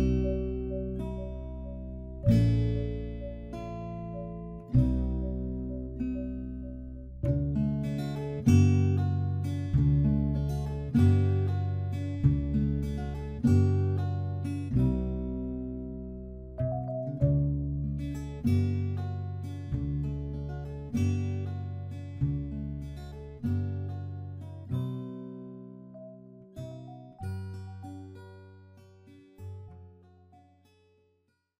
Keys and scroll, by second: 5.9 ctrl+t, 20.7 ctrl+j, 21.8 ctrl+t.